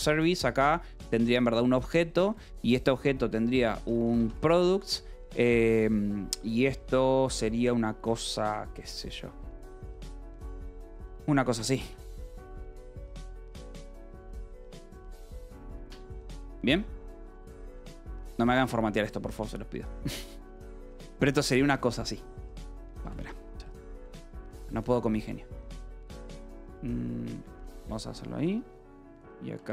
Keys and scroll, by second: 0.0 BackSpace, 1.1 Return, 2.2-4.6 typing, 5.9 =, 6.3 BackSpace, 6.8 space, 8.4 {, 8.7 BackSpace, 9.8 [, 10.4 Return, 11.4 {, 11.8 Escape, 12.6 a, 13.0 space, 14.9 ctrl+g, 15.5 ctrl+g, 16.2 Escape, 16.4 k, 17.6 shift+s, 17.9 Escape, 18.8 j, 20.4 k, 23.2 k, 24.3 j, 25.8 shift+., 27.7 Escape, 27.9 j, 29.5 k.